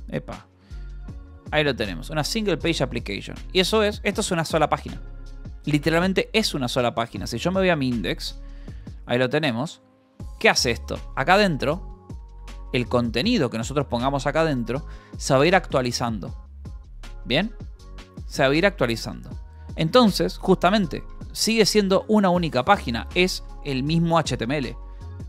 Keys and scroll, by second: 0.6 c, 1.2 Escape, 2.4 shift+v, 2.6 Escape, 3.1 d, 3.7 k, 6.7-8.3 typing, 9.0 Return, 9.4-15.0 typing, 20.4 Escape, 21.3 g, 22.4-23.9 typing, 24.7 Escape.